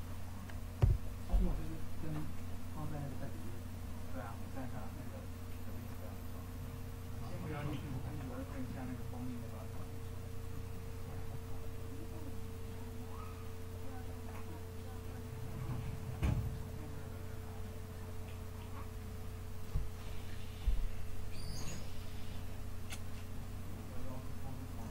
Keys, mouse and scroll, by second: 3.1-24.1 drag, 24.8 click.